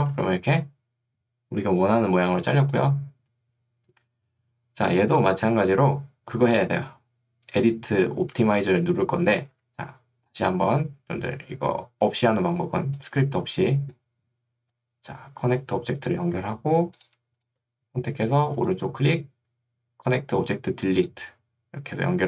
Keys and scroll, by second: 8.5 ctrl+2, 9.5 Escape.